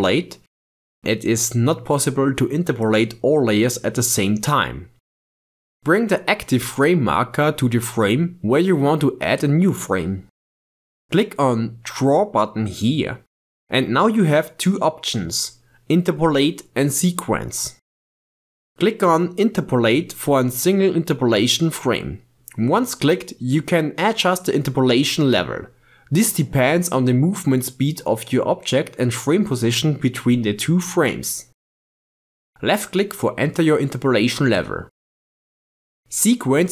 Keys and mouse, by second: 0.1 click, 12.6-22.1 drag, 26.5-27.6 drag, 28.6-29.8 drag, 35.7-36.7 drag.